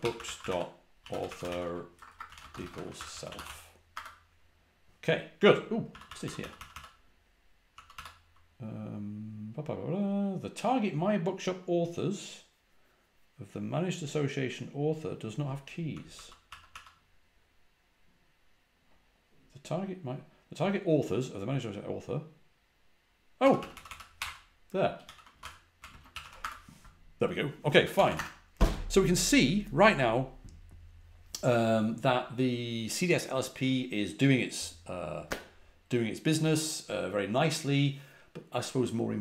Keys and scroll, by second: 0.0-3.9 typing, 5.8-8.3 typing, 15.6-17.1 typing, 23.1-26.6 typing, 28.0 typing.